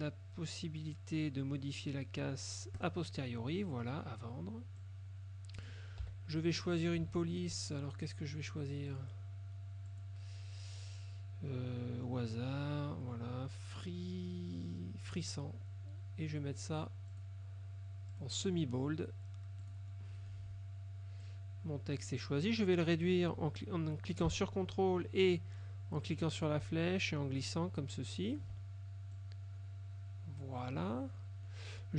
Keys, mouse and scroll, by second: 2.9 click, 4.9 click, 6.1 t, 9.0 click, 10.0 click, 15.2 click, 17.2 click, 18.2 click, 19.7 click, 21.4 click, 26.2-28.7 ctrl+drag, 29.3-31.1 drag, 31.1 middle click.